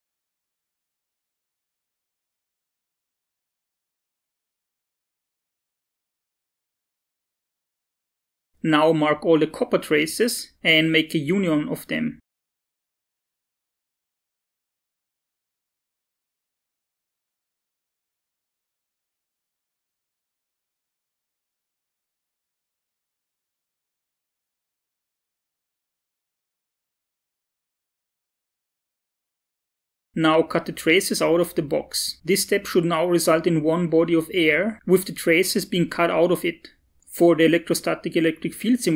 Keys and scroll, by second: 0.8 Down, 2.3 Tab, 2.6 Up, 3.4 Down.